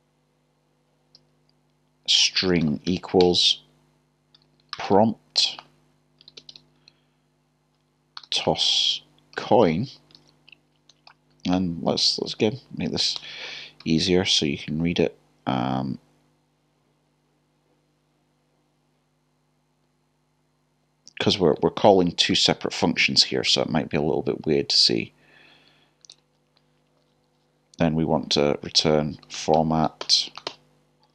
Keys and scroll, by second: 2.1 =, 4.4-5.3 typing, 6.3 typing, 8.2 typing, 10.9 typing, 13.9-14.5 typing, 25.5 typing, 31.0 typing.